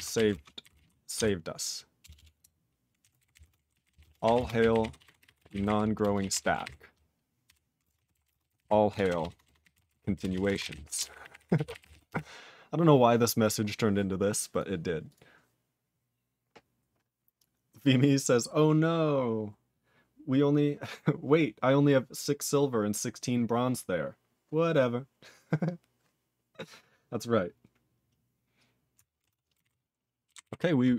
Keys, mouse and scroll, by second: 30.5 ctrl+c.